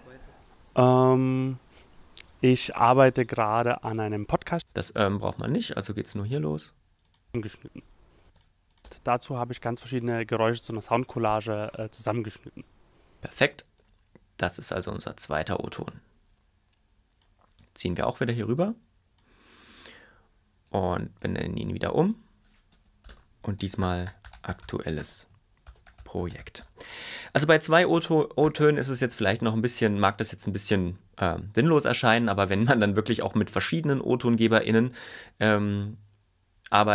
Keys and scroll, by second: 4.6 space, 7.2 space, 13.3 space, 22.7-26.3 typing, 28.4 Return.